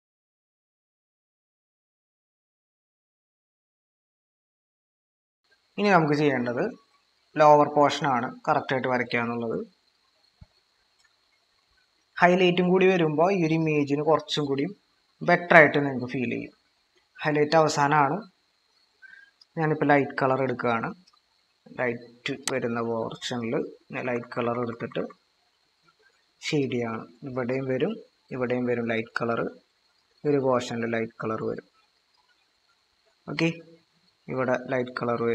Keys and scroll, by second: 3.4 ctrl+=, 3.6 ctrl+-, 3.6 ctrl+=, 6.6 ctrl+-, 8.1 ctrl+=, 8.2 ctrl+-, 18.4 ctrl+=, 24.0-25.0 typing.